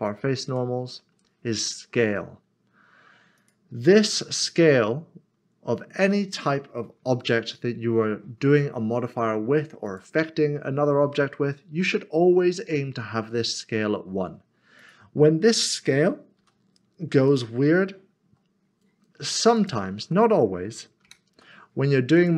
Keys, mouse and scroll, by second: 0.7 Tab, 3.4 click, 9.8 click, 14.8 click, 16.4 s, 19.4 click, 19.5 shift+click, 22.2 click.